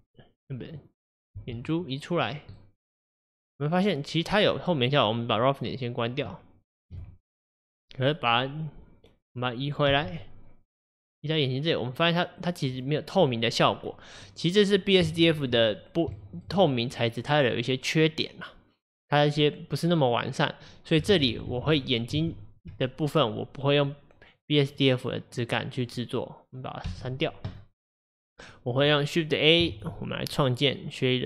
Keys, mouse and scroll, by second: 0.9 click, 1.4 g, 2.6-5.5 middle drag, 5.5-9.9 drag, 9.9 g, 13.8-14.2 scroll down 1, 14.2-21.1 middle drag, 21.1 ctrl+z, 21.4 ctrl+z, 25.1-26.9 drag, 26.9 x, 29.0 click.